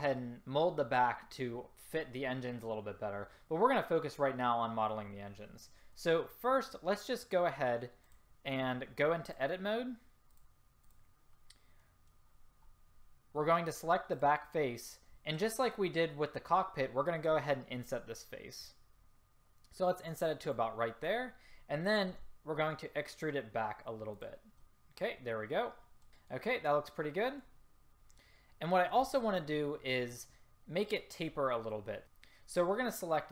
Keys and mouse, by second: 8.2-10.4 drag, 11.3-12.8 drag, 13.8-15.7 drag, 14.2 right click, 16.7-18.7 middle drag, 18.7-24.3 drag, 22.3 e, 24.7-25.1 drag, 32.0 a.